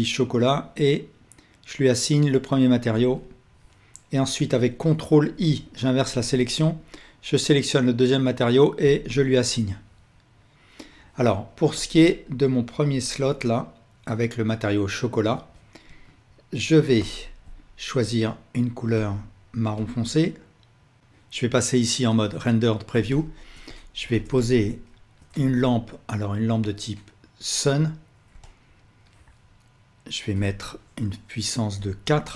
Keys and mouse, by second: 3.0-6.8 drag, 5.4 ctrl+i, 8.9-16.9 drag, 15.4 alt+a, 15.9 Tab, 17.0-18.3 ctrl+alt+drag, 21.0-22.4 middle drag, 23.0 alt+shift+drag, 23.2-24.0 alt+shift+middle drag, 25.5 shift+a.